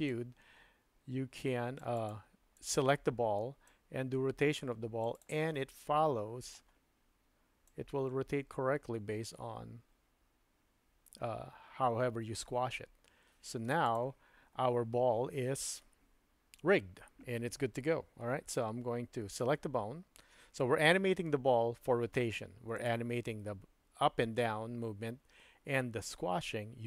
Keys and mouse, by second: 0.1-2.1 drag, 2.5 click, 3.6-5.2 drag, 5.6-6.6 middle drag, 7.7-13.9 drag, 22.7 click.